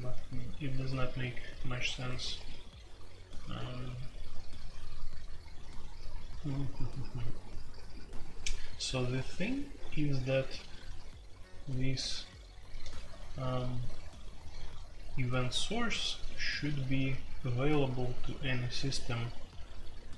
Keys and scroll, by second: 12.8-13.7 typing.